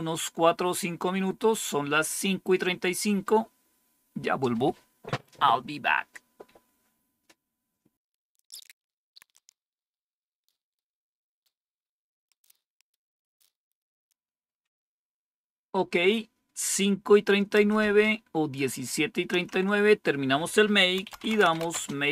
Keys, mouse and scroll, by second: 17.5 Up, 19.3 Down, 20.7-22.1 typing.